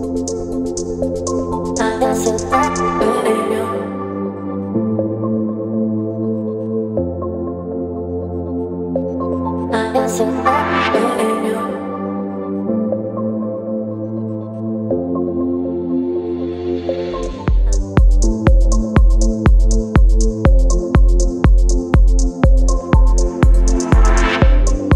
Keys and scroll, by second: 12.6 space, 15.8 Return, 22.1 Return, 23.3 space.